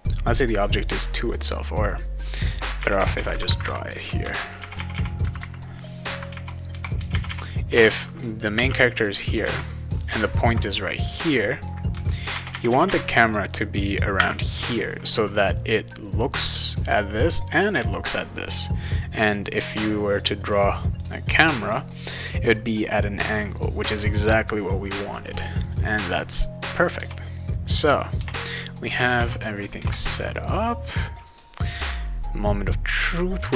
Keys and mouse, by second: 0.6 click, 1.5 click, 1.9 click, 2.8 Tab, 2.9 Tab, 3.1 Tab, 3.3 /, 3.5 /, 4.6 Tab, 4.7 Tab, 4.9 Tab, 5.2 /, 6.1 /, 6.3 Tab, 7.0 Tab, 7.3 Tab, 8.5 0, 9.4 Tab, 10.4 ,, 12.3 Tab, 12.5 Tab, 12.6 Tab, 12.8 Tab, 14.1 ., 20.1 click, 21.6 click, 24.7 click, 25.6 click, 26.0 click, 27.5 click, 28.2 BackSpace, 29.1 ctrl+s, 29.8 alt+Tab.